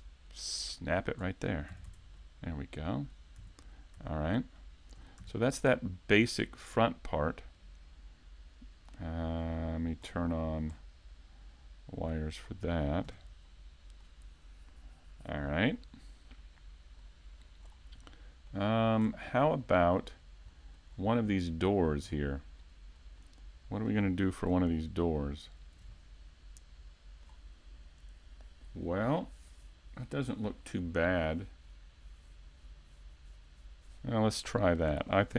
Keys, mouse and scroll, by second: 0.2 click, 0.2 scroll up 2, 1.2-1.9 scroll down 3, 1.7 a, 1.9 Tab, 2.2 middle click, 3.4 a, 4.0 a, 4.6 shift+middle click, 5.2 a, 5.5 middle click, 6.1 scroll up 2, 6.6 shift+middle click, 7.5 right click, 9.4 click, 10.0-10.7 scroll down 2, 11.0 scroll down 7, 11.9 click, 12.4-13.1 scroll down 1, 13.1 a, 13.5 middle click, 16.6-17.0 scroll up 2, 17.0 middle click, 17.6-18.2 scroll down 2, 18.0 middle click, 19.0 scroll down 1, 19.6 middle click, 19.6 scroll down 1, 20.5 middle click, 21.1 scroll up 1, 21.4 middle click, 22.1 scroll down 1, 22.6 middle click, 23.2 middle click, 25.2 alt+click, 25.9 middle click.